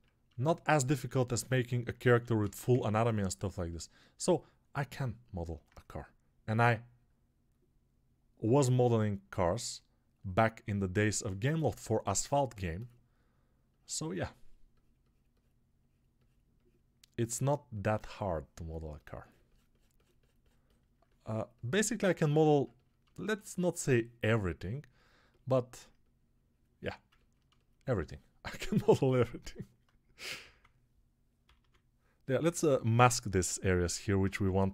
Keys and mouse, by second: 1.0 alt+q, 23.2-27.2 alt+drag, 23.2-27.2 alt+middle drag, 23.2-27.2 alt+right drag, 29.9 [, 30.0 [, 30.1 [, 30.3 [, 31.3 ], 31.5 ], 32.3 m, 34.2 ctrl+z.